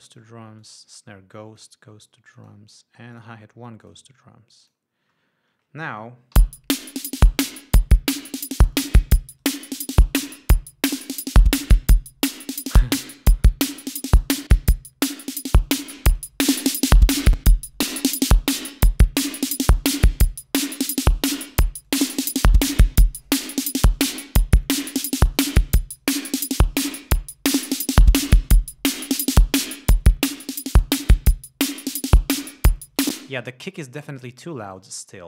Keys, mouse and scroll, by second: 0.4 click, 1.0 click, 1.9 click, 2.7 click, 3.5 click, 4.2 click, 5.0 click, 5.5 scroll down 2, 6.7 l, 8.3 scroll up 2, 9.1 click, 9.8 right click, 14.5 click, 16.1-16.7 drag, 17.0-17.7 drag, 18.6-19.2 drag, 19.5-20.1 drag, 20.6-21.2 drag, 22.2-22.8 drag, 23.0-24.4 drag, 24.5-26.5 drag, 27.2-29.0 drag, 29.2-30.3 drag, 30.4-32.4 drag, 33.2-33.9 drag, 33.9 space, 34.6-35.2 drag.